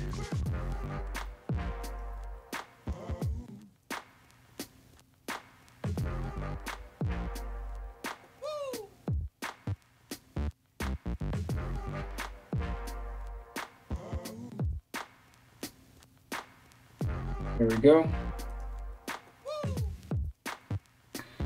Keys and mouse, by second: 1.5 right click, 1.7-3.4 middle drag, 3.4 alt+right click, 3.5-5.0 alt+middle drag, 5.0 alt+right click, 5.1-10.3 alt+middle drag, 6.0 g, 7.3 g, 10.3 right click, 10.4 middle click, 10.8 right click, 10.9 ctrl+middle click, 11.3 ctrl+right click, 11.5-14.3 ctrl+middle drag, 12.0 g, 12.7 g, 14.3 right click, 14.5-15.8 middle drag, 14.7 g, 15.8 right click, 16.0-21.4 middle drag, 16.2 g, 17.7 g, 19.3 right click, 19.4 g, 20.2 right click, 20.4 g.